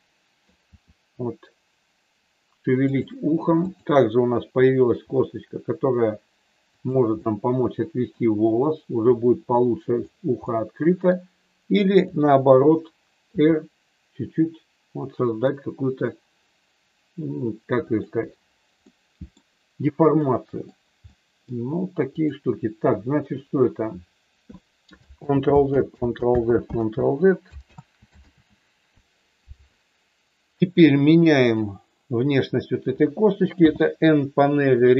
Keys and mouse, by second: 3.5 click, 5.0 r, 6.6 click, 7.3 middle click, 9.6 middle click, 10.4 middle click, 13.4 r, 17.9 click, 18.8 middle click, 20.3 middle click, 21.0 middle click, 22.0 click, 25.3 ctrl+z, 26.1 ctrl+z, 27.8 ctrl+z, 28.3 ctrl+z, 31.4 click, 33.5 n, 34.6 click.